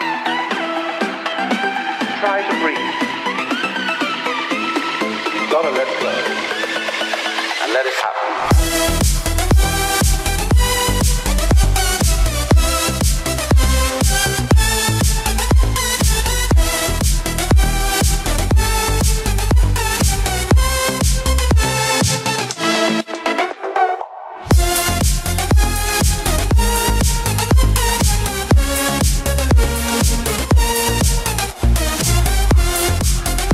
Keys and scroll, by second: 13.1 shift+F5, 19.6 ctrl+d, 30.4 ctrl+z.